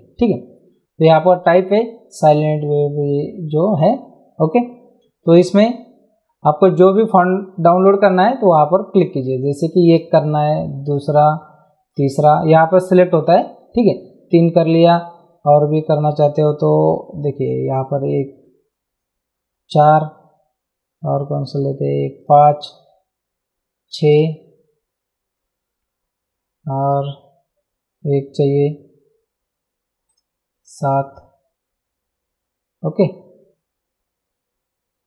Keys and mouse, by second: 9.9 click, 10.9 click, 18.1 click, 22.2 click, 24.1 click, 30.1 click.